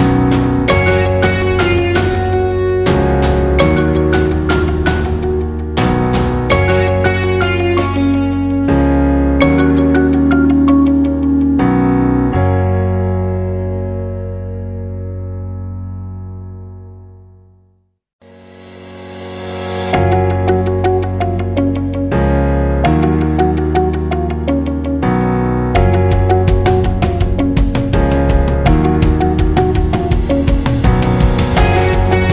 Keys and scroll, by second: 9.8-10.4 space.